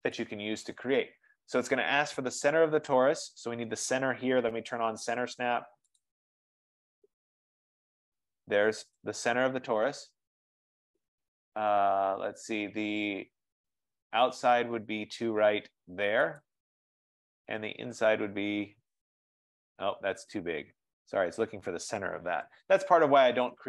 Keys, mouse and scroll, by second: 0.2 click, 2.8-5.3 drag, 6.2-7.2 drag, 9.1 click, 13.9 click, 16.5-21.6 drag, 22.5 Escape.